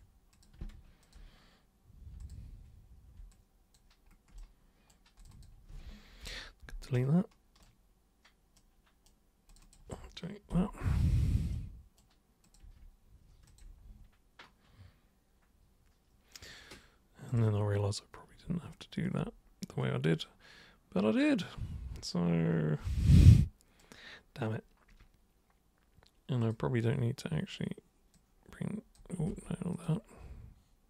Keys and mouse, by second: 0.3 super+click, 1.0 ctrl+shift+super+click, 2.2 super+click, 3.3 alt+super+click, 5.2 super+click, 5.3 super+click, 6.9 super+right click, 8.6 super+right click, 9.5 super+click, 11.5 super+right click, 12.4 super+click, 13.5 ctrl+shift+super+click, 17.3 super+click, 23.2 super+right click, 26.4 super+click, 28.1 super+click, 29.3 ctrl+super+z, 29.7 super+click.